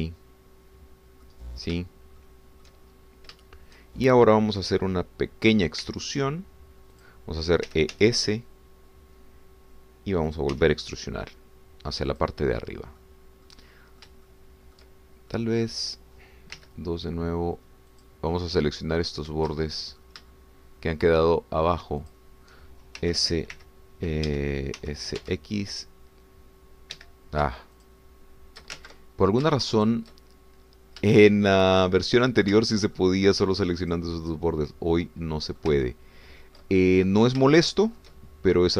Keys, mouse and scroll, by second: 0.6 click, 1.0-2.4 middle drag, 3.2 shift+middle click, 4.0 shift+scroll up 2, 4.4 shift+middle click, 6.8 e, 8.0 click, 8.7 e, 9.0 s, 11.3 click, 11.6 e, 13.1 click, 13.5-15.2 middle drag, 15.3 shift+middle click, 16.3-17.3 middle drag, 19.1 click, 19.3 middle click, 20.6 shift+middle click, 21.3 shift+click, 23.2 shift+click, 24.0 shift+s, 24.5 y, 25.3 Escape, 25.8 s, 26.2 x, 28.0 Escape, 28.8 shift+click, 29.8 ctrl+shift+z, 30.9 shift+click, 31.2-34.1 shift+middle drag, 34.8 shift+click, 35.3-36.7 shift+middle drag, 36.7 ctrl+click, 36.8-38.7 ctrl+drag.